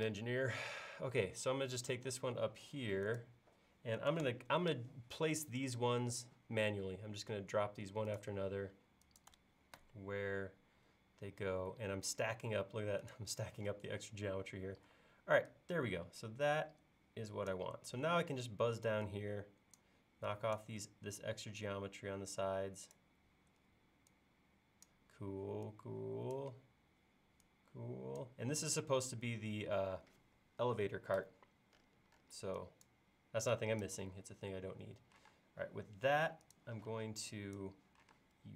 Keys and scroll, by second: 14.8 e, 35.3 space, 36.9 e, 38.1 space.